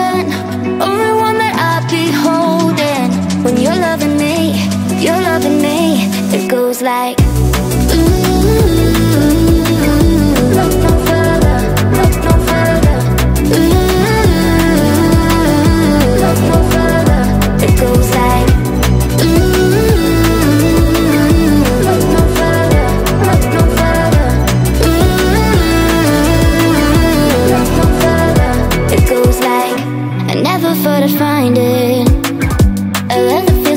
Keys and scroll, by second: 12.2 space.